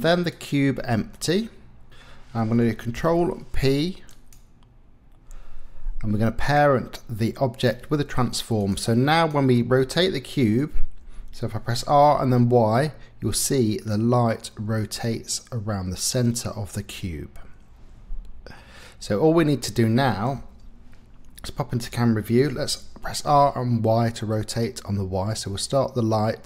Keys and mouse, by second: 1.1 click, 3.0 ctrl+p, 8.6 click, 9.1 click, 11.0 r, 12.1 y, 19.3 Escape, 20.3 KP_0, 22.5 r, 23.2 y.